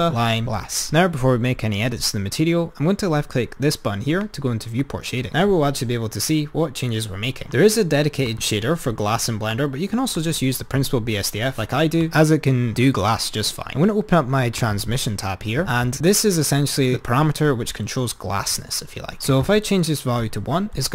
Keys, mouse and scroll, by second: 4.9 click, 7.3-8.5 drag, 9.7-12.1 drag, 12.2 click, 14.6 click, 19.4-20.9 drag.